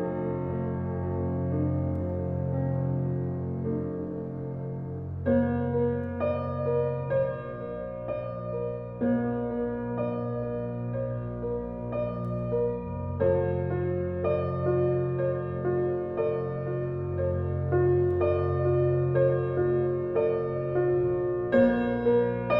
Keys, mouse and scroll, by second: 2.1 shift+d, 4.8 click, 6.8 click, 7.5-8.5 shift+middle drag, 8.5 click, 11.9 drag, 12.5-12.9 scroll up 7, 13.4 drag, 13.8 shift+click, 14.6 shift+click, 15.0 scroll down 5, 16.0 click, 16.9-18.3 shift+middle drag.